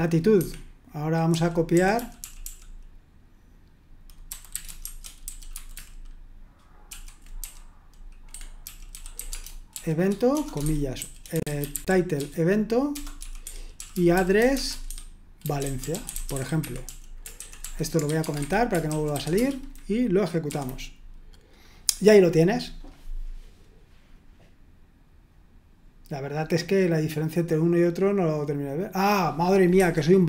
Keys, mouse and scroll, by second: 0.0-2.9 typing, 0.4 Escape, 4.0-20.5 typing, 8.3 Escape, 28.9 click, 29.8 Escape.